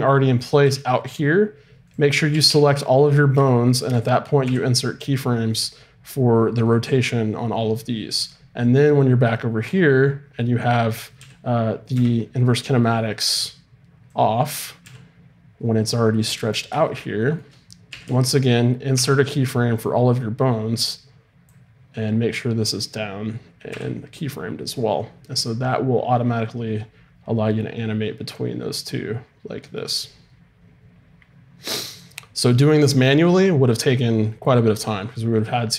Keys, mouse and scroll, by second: 0.6 g, 2.3 a, 2.5 a, 4.4 i, 8.7-11.2 drag, 11.2 g, 12.4-15.2 drag, 13.4 right click, 14.8 g, 17.9 a, 18.1 a, 18.9 i, 20.8-23.5 drag, 25.5-27.2 drag.